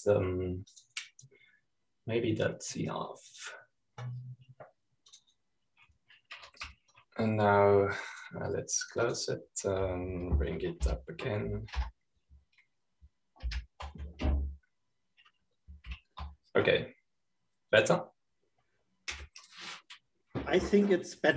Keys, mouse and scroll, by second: 0.0-0.5 typing, 1.0 click, 2.2 click, 4.9-6.1 drag, 6.6 click, 9.6-11.3 drag, 12.4 super+-, 13.0 Up, 13.3 Return, 15.0 super+-, 17.5 super+f, 19.2 click.